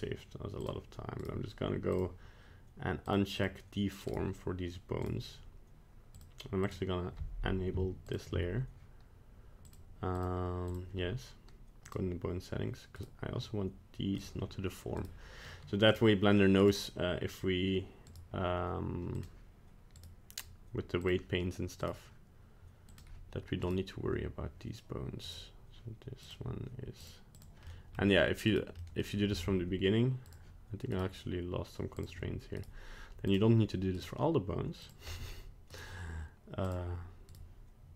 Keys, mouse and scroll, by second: 0.6 click, 1.2 right click, 1.9 click, 3.1 click, 3.3 click, 4.1 right click, 5.0 right click, 6.2 click, 6.6 click, 8.1 shift+click, 9.6 click, 10.1 click, 10.7 click, 11.8 click, 13.0 right click, 14.2 click, 15.0 right click, 15.9 click, 16.6 right click, 18.1 right click, 19.1 click, 20.0 right click, 21.0 click, 21.8 right click, 22.9 click, 23.7 right click, 25.3 right click, 26.2 click, 27.0 click, 27.4 click, 27.6 middle click, 28.5 right click, 28.8 middle click, 30.3 click, 30.9 right click, 32.0 click, 32.6 right click, 33.3 click, 34.0 right click, 34.8 click, 35.1 middle click, 35.7 right click, 36.7 click, 37.3 right click.